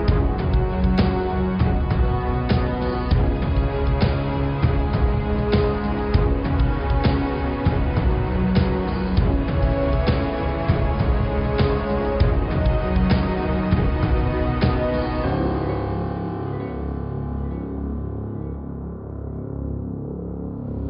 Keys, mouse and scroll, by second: 2.0-3.2 middle drag, 3.2-3.7 scroll up 1, 3.7 s, 7.1-8.8 middle drag, 8.8-9.1 scroll up 2, 9.1 click, 9.5 ctrl+r, 10.0 Tab, 10.7 ctrl+r, 12.0-13.2 middle drag, 13.2 s, 14.7-16.1 middle drag, 16.1 scroll up 1, 16.1-16.5 scroll down 3, 16.5-17.0 scroll up 2, 16.6 middle click, 17.3-18.5 middle drag, 18.5 scroll down 1, 18.8 Tab, 19.0-20.8 middle drag.